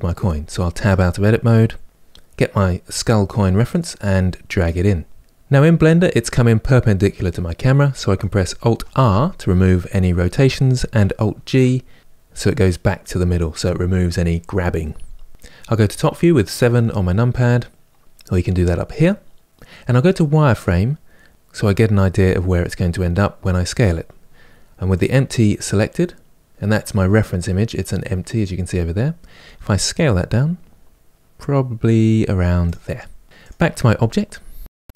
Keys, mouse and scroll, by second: 0.5 Tab, 5.2 scroll down 7, 5.4 click, 5.8-8.6 middle drag, 8.6 alt+r, 11.0 alt+g, 15.8 KP_7, 20.2 click, 24.6 click, 29.1 s, 33.2 click, 34.6-34.9 scroll up 6.